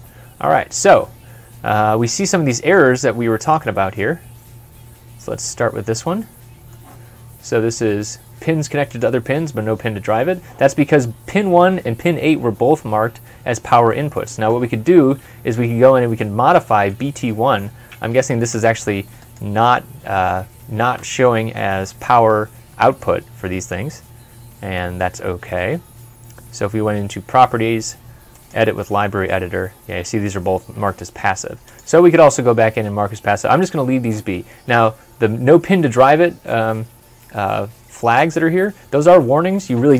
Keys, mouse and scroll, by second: 2.6 scroll up 1, 3.1-3.6 scroll down 1, 3.6 scroll up 1, 5.0 middle click, 13.7 middle click, 16.8 typing, 18.1 Escape, 19.0 right click.